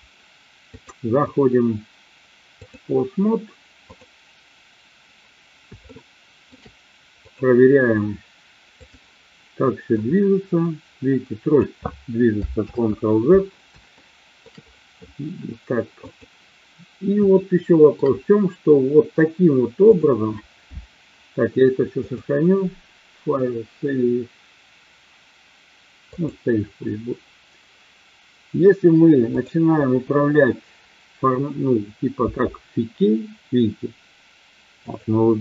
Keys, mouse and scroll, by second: 0.6-2.7 drag, 3.9 click, 5.9-6.5 shift+middle drag, 7.2 click, 8.7 click, 9.9-11.6 drag, 12.6 ctrl+z, 13.9-14.4 shift+middle drag, 16.0-16.9 drag, 17.2-18.0 shift+middle drag, 22.0-26.4 drag, 29.4-30.1 drag, 32.2 r, 34.9 click.